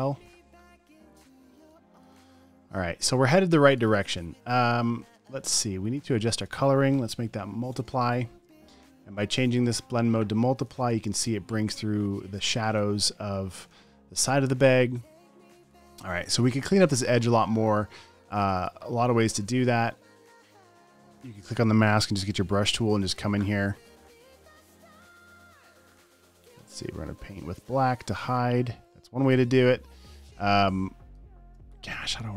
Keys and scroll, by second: 1.9 space, 2.7 space, 2.9 space, 3.4 space, 5.5 space, 5.9 v, 6.1 space, 6.8 v, 7.5 alt+shift+m, 8.1 v, 8.2 space, 8.7 space, 11.3 alt+super+space, 12.9 space, 13.6 space, 15.6 space, 16.2 super+space, 18.7 alt+super+space, 19.5 space, 20.0 space, 20.2 space, 20.5 space, 22.4 b, 23.3 super+space, 23.9 space, 24.1 space, 26.7 x, 30.0 super+z, 30.6-32.1 typing.